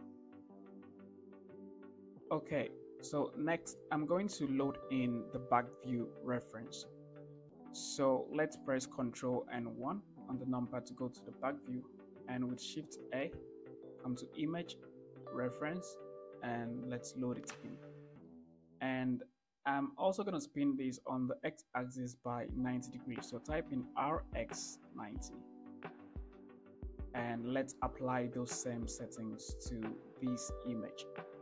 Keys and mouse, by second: 0.3-0.7 shift+middle drag, 7.7-8.0 shift+middle drag, 9.7 ctrl+KP_1, 13.2 shift+a, 18.6-19.0 shift+drag, 24.1 r, 24.5 x, 25.2 9, 25.5 0, 27.0-28.0 ctrl+drag.